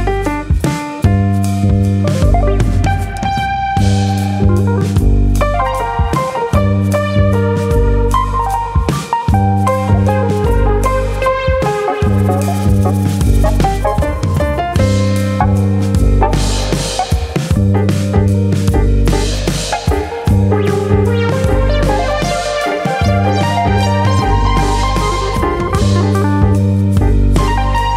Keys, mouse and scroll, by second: 0.4 click, 0.6 middle click, 1.1 click, 1.4 g, 2.0 click, 2.3 click, 2.5 middle click, 3.0 click, 3.3 g, 4.2 click, 4.4 middle click, 5.0 Tab, 5.3-6.1 scroll down 4, 5.6 middle click, 6.1-6.6 scroll up 1, 6.6 middle click, 7.5 click, 8.8 ctrl+z, 8.9 KP_1, 9.8-10.8 scroll up 2, 10.8 click, 12.8 click, 17.2 click, 17.2 middle click, 18.0 click, 18.7 middle click, 19.0 middle click, 20.6 click, 21.4 middle click, 22.4 middle click, 25.0 middle click, 25.0 click, 25.9 middle click.